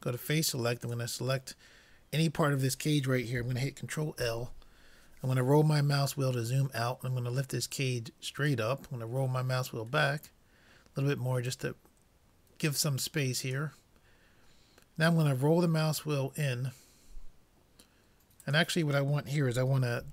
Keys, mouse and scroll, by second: 4.4 ctrl+l, 5.8 middle click, 7.7-9.5 drag, 10.2-11.6 middle drag, 11.5-13.4 drag, 14.1-17.9 middle drag, 18.5-20.1 drag.